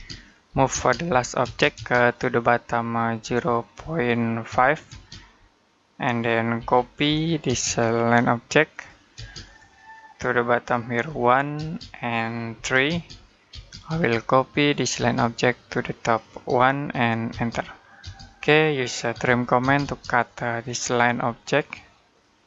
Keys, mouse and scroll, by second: 0.0-1.3 typing, 1.9 click, 3.1 0, 4.3-4.7 typing, 6.4-7.3 typing, 8.5 click, 9.0 space, 9.3 click, 10.9 1, 11.4 space, 12.4 3, 12.7 space, 13.9 click, 14.8 space, 15.0 click, 16.3 1, 17.1 space, 19.0-19.4 typing, 20.1 click, 21.0-21.9 scroll up 1, 21.9 click.